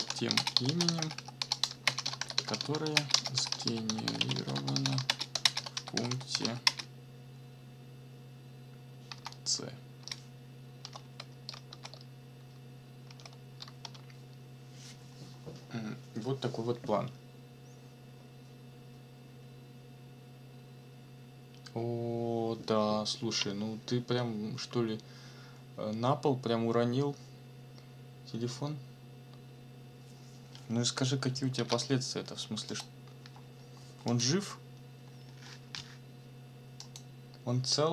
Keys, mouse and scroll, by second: 0.0-6.8 typing, 6.9 ctrl+shift+space, 10.8 shift+9, 11.7 shift+c, 13.1 shift+0, 31.6 ctrl+s, 32.7 click, 34.1 click, 36.8 click.